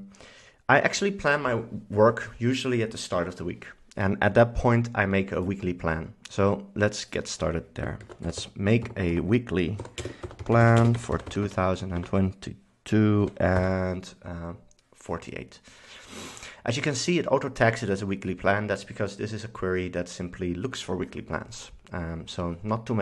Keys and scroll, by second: 7.9-12.1 typing, 13.3 4, 13.7 8.